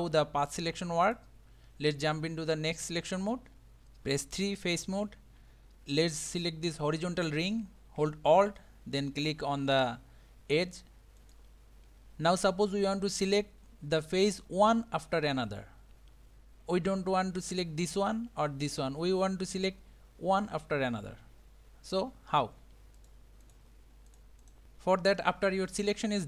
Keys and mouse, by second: 1.1 click, 2.8 middle click, 4.4 3, 11.2 alt+click, 17.8 shift+click, 18.6 shift+click, 23.0 shift+click, 23.5 shift+click, 24.1 shift+click, 24.4 shift+click.